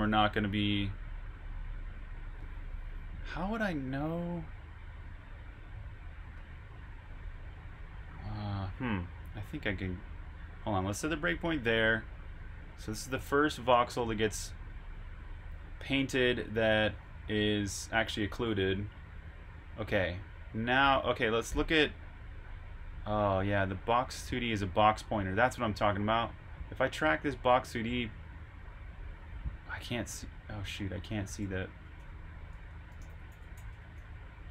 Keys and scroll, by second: 31.9-33.9 typing.